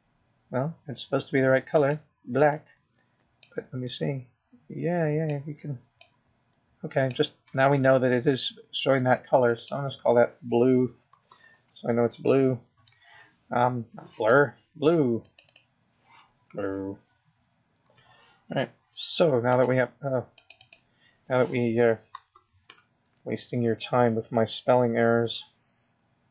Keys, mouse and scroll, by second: 4.2 click, 11.8 click, 12.0 click, 17.7 click, 17.9 click, 22.8 click, 23.0 click.